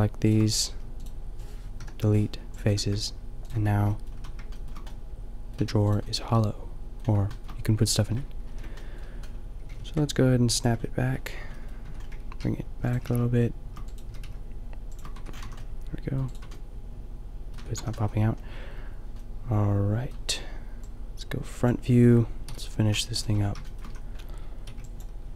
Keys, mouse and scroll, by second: 0.7 g, 1.7 Delete, 2.6 Tab, 3.8 Tab, 4.1 a, 5.5 a, 8.5 ctrl+l, 9.6 g, 11.3 Tab, 11.9 Tab, 12.3 g, 13.0 g, 14.0 g, 15.1 Tab, 15.5 a, 16.4 Tab, 17.5 Tab, 17.8 a, 22.4 KP_5, 23.3 Tab, 23.9 a, 24.7 b.